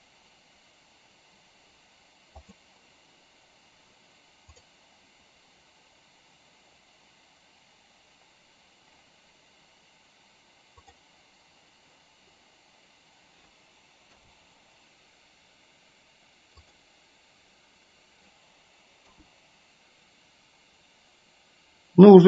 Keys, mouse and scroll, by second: 11.2 click, 17.2 click, 19.7 KP_0.